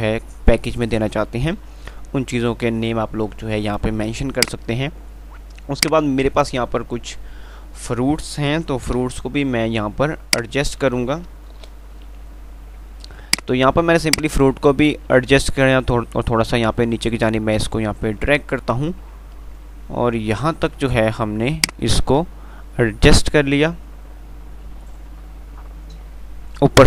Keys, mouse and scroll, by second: 1.8 shift+Page_Up, 4.6-9.2 drag, 6.4 typing, 9.2 shift+Page_Up, 9.9 F2, 11.8 shift+Page_Up, 14.9 ctrl+r, 21.9-23.8 drag, 23.8 ctrl+r.